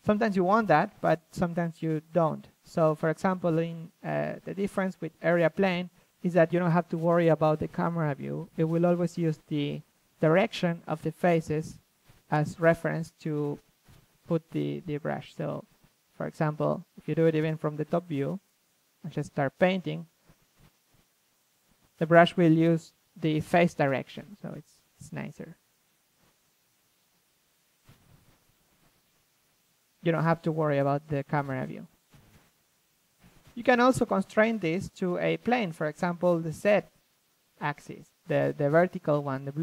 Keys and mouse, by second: 1.1-1.5 drag, 1.5-4.4 middle drag, 4.4 ctrl+z, 6.9-7.7 drag, 8.7-13.5 drag, 14.1 middle click, 14.3-19.6 drag, 19.7-30.0 drag, 31.2-32.9 drag, 32.9-35.1 middle drag, 35.1-39.6 drag.